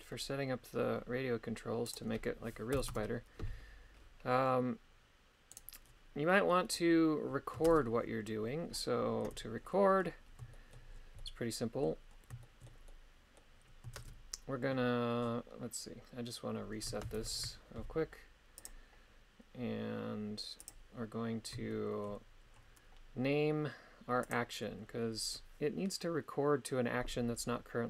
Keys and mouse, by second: 2.0 click, 5.5 right click, 7.7 shift+space, 9.3 KP_3, 10.5 shift+middle click, 11.2 middle click, 12.4 shift+middle click, 12.9 middle click, 14.0 shift+space, 17.4 shift+Left, 18.6 click, 20.7 click, 21.7 shift+middle click, 24.2-27.8 drag.